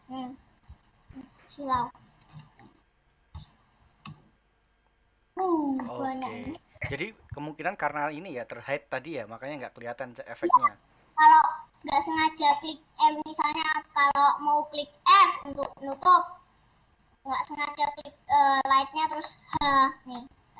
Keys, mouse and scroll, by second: 2.4-2.8 scroll down 3, 3.2 h, 4.7 alt+h, 5.6 middle click, 6.3-6.8 scroll up 5, 7.0 scroll down 1, 9.5 click, 12.0 click, 12.6 middle click, 13.3-13.8 scroll up 1, 13.8-15.8 scroll down 1, 15.8-17.3 middle drag, 17.3-18.5 scroll down 2, 18.8 click, 19.2 middle click, 19.5 h, 20.2 middle click.